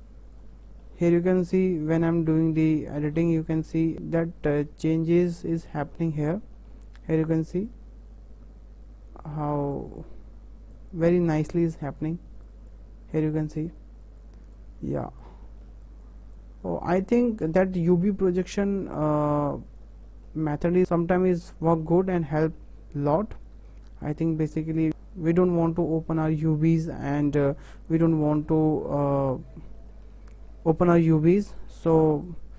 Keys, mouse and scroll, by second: 3.6 scroll up 2, 3.9-7.2 shift+middle drag, 7.2 click, 7.7 click, 10.9 click, 11.3 click, 12.7 click, 13.3 click, 14.2 Left, 14.6 Left, 16.0 Left, 16.4 Left, 18.0 Left, 18.6 Left, 20.8 Left, 24.0 Left, 25.4 Left, 27.0 Left, 28.0 Left, 31.8 Left, 32.3 click.